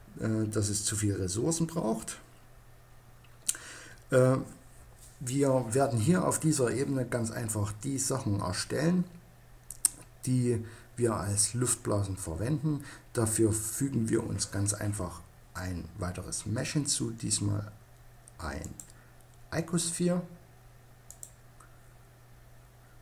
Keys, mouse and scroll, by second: 18.0-19.9 drag.